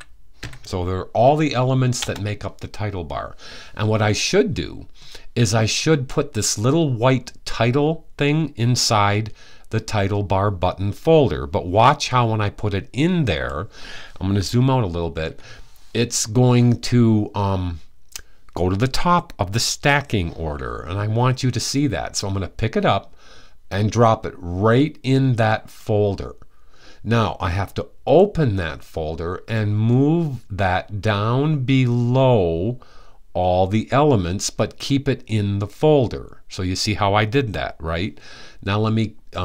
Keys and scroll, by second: 0.0-0.1 typing.